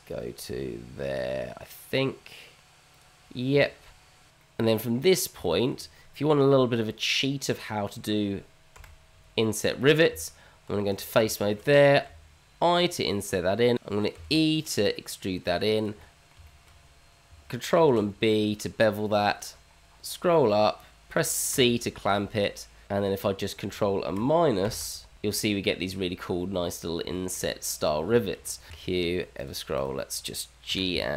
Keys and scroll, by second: 8.7 KP_Divide, 10.1 Tab, 12.0 i, 14.1 e, 17.7 ctrl+b, 23.1 Tab, 26.6 h, 28.7 q, 30.7 g.